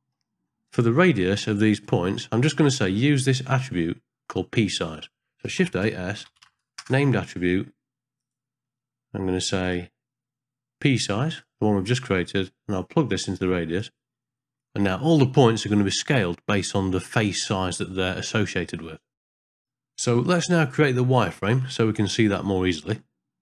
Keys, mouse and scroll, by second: 0.2 middle click, 1.3 click, 4.7 click, 5.5 shift+a, 9.6-11.5 drag, 12.7-13.8 drag, 14.7 ctrl+middle click, 15.4 shift+middle click, 16.0-18.6 middle drag, 20.2 middle click, 21.4 click, 22.7 click.